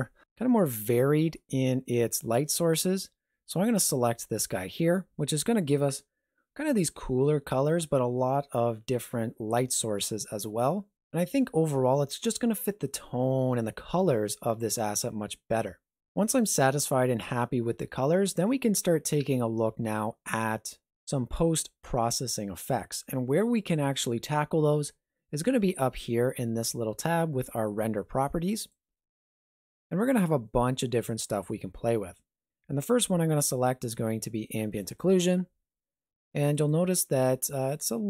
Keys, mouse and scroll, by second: 28.5 click, 34.8 click, 36.5 click.